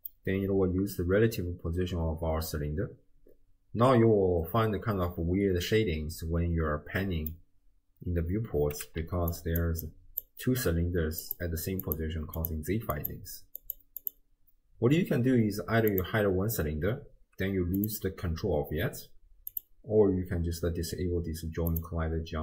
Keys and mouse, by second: 0.1-2.7 middle drag, 2.8-7.3 middle drag, 9.0 d, 9.3 click, 9.6 d, 9.8 d, 9.8 click, 10.4 d, 11.3 click, 11.8 click, 12.4 click, 13.0 click, 13.6 click, 14.0 click, 15.9 click, 17.8 click, 19.5 click, 21.7 click.